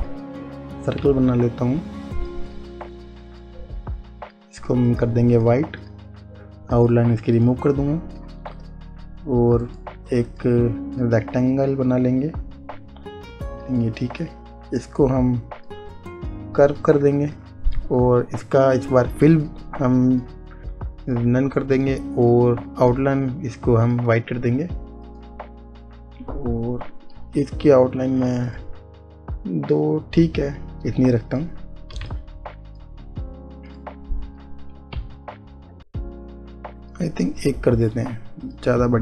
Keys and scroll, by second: 35.9 Right.